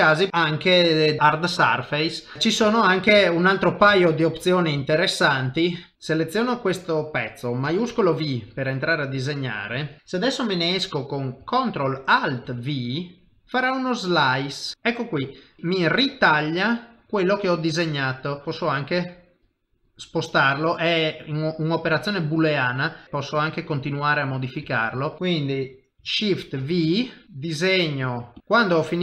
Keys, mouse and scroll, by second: 0.0 shift+middle click, 0.3 ctrl+Tab, 0.3 shift+middle click, 1.1 click, 1.2 middle click, 2.3 middle click, 2.3 KP_1, 2.3 KP_3, 2.7 shift+middle click, 2.7 shift+middle click, 3.2 ctrl+middle click, 3.9 shift+middle click, 5.3 shift+middle click, 7.9 shift+v, 8.5 click, 15.5 middle click, 15.6 ctrl+middle click, 18.3 click, 18.4 middle click, 18.4 g, 20.3 middle click, 24.7 shift+middle click, 25.0 middle click, 25.2 shift+middle click, 25.2 click, 26.6 shift+v, 27.2 click.